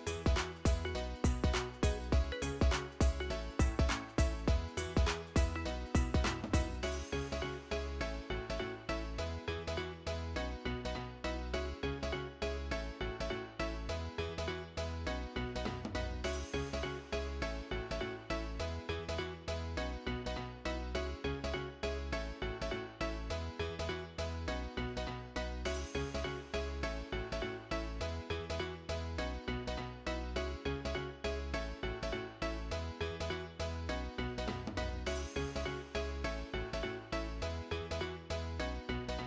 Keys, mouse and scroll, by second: 1.2 double click, 20.2 middle click, 21.1 middle click, 21.2 middle click, 23.1-24.8 scroll up 3, 25.0-27.8 scroll down 1, 37.5-37.9 scroll up 2, 38.7-39.2 scroll down 1.